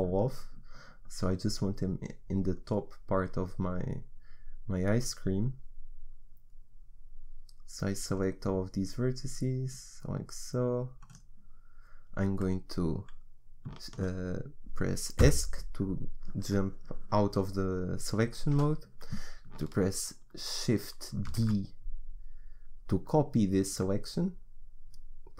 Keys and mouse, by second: 22.6 shift+d.